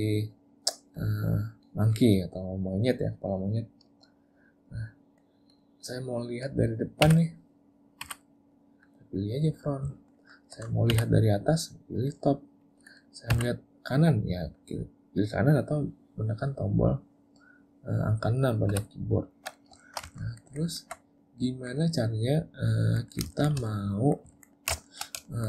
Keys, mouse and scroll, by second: 3.2 middle click, 5.5 click, 7.1 `, 8.1 `, 10.0 ctrl+middle click, 10.2 ctrl+middle click, 10.9 `, 19.9 shift+middle click, 20.1 ctrl+middle click, 20.3 ctrl+middle click, 20.5 ctrl+middle click, 20.7 ctrl+middle click, 21.2 middle click, 22.7 middle click, 23.1 middle click, 23.4 shift+middle click, 23.7 middle click, 24.4 ctrl+middle click, 24.6 ctrl+middle click, 24.9 shift+middle click, 25.3 ctrl+middle click.